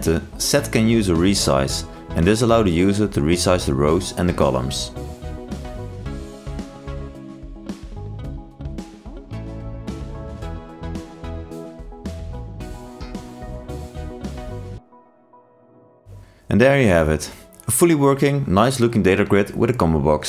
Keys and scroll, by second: 2.9 ctrl+space, 6.2 ctrl+shift+i, 14.6 ctrl+e, 15.2 ctrl+r.